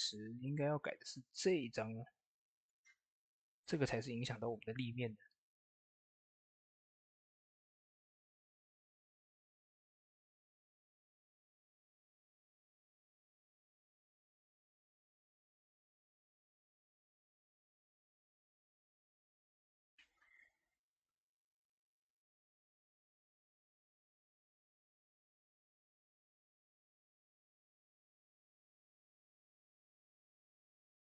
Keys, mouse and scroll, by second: 10.2 ctrl+s, 11.0 click, 15.5 click, 27.6 click, 27.6 click, 30.7 ctrl+s.